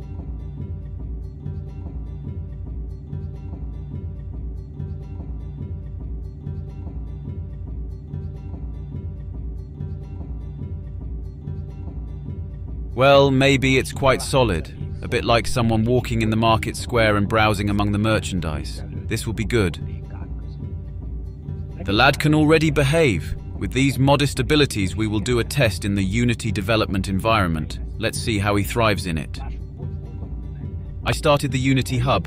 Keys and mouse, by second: 10.7-24.0 middle drag.